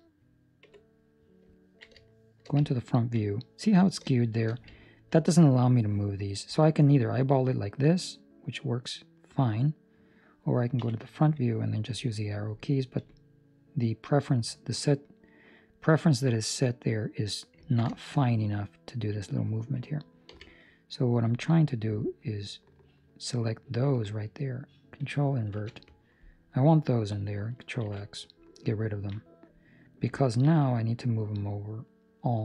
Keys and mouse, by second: 0.6 KP_1, 1.5 ctrl+middle click, 2.0 shift+middle click, 2.6 ctrl+middle click, 4.0 ctrl+middle click, 4.8 ctrl+middle click, 6.6 middle click, 10.7 KP_1, 11.6 KP_4, 12.9 KP_6, 14.6 middle click, 16.0 ctrl+middle click, 16.3 middle click, 17.7 ctrl+middle click, 17.8 shift+middle click, 18.1 middle click, 18.8 shift+middle click, 19.0 middle click, 19.6 shift+middle click, 20.2 c, 25.4 ctrl+i, 26.2 middle click, 27.7 ctrl+x, 28.2 middle click, 28.9 ctrl+middle click, 29.2 middle click, 30.2 ctrl+middle click, 30.6 middle click, 30.7 middle click, 30.9 ctrl+middle click.